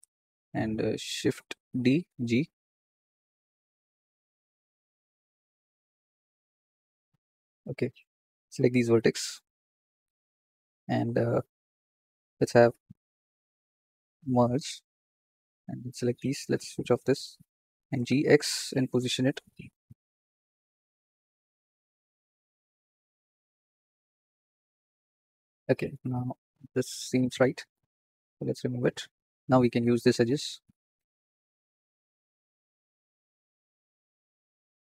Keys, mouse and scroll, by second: 1.6 shift+d, 4.3 g, 6.5 g, 8.0 1, 8.5 click, 13.4 m, 15.3 click, 16.2 click, 16.8-17.3 scroll up 7, 17.7 g, 20.2 shift+middle click, 20.4-21.8 scroll up 17, 21.0 shift+middle click, 21.8 shift+middle click, 22.3 g, 24.1-25.1 scroll down 24, 25.1 shift+middle click, 25.9 click, 28.0 x, 29.3 2, 29.5 click, 30.0 shift+click, 30.3 shift+click, 31.2 shift+click, 31.5 shift+click, 32.0 shift+click, 32.3 shift+click, 32.5 shift+middle click, 33.1 shift+click, 33.5-33.8 scroll down 2, 33.8-34.9 shift+middle drag.